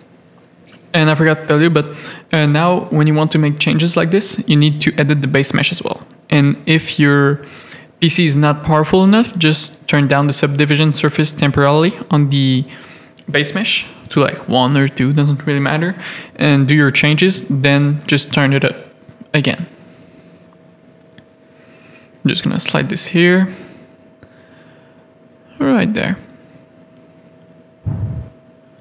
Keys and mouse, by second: 1.0 click, 2.4 Tab, 4.2 z, 4.5 a, 5.0 click, 5.8 z, 6.2 g, 8.9 Tab, 14.1 click, 15.0 Tab, 15.3 z, 15.7 a, 16.6 click, 17.3 right click, 18.9 click, 19.5 g, 22.3 g, 25.5 a, 27.7 Tab, 28.1 z.